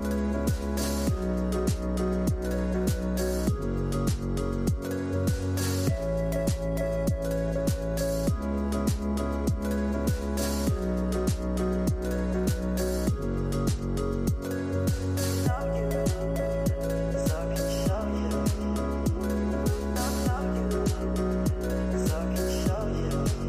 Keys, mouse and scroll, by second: 0.4 scroll down 6, 0.9-3.6 shift+middle drag, 3.6 g, 6.3 click, 7.4 g, 9.7 i, 11.9-13.4 drag, 13.4 g, 16.7 i, 20.7 KP_0, 22.1 click, 22.6 space.